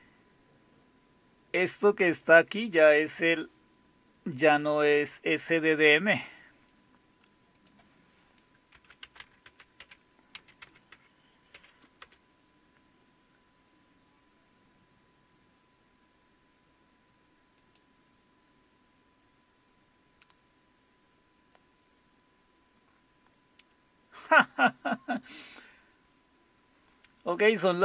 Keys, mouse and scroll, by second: 6.2 click, 7.6 click, 8.8-11.5 typing, 12.0 Return, 17.6 click.